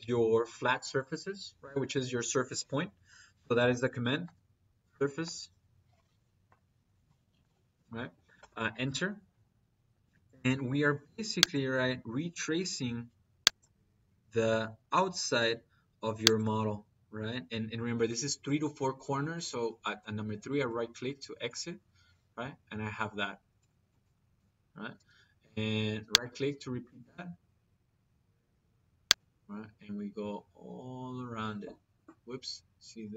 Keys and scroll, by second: 2.9 Escape, 3.9 s, 4.1 r, 8.2 Return, 24.8 –.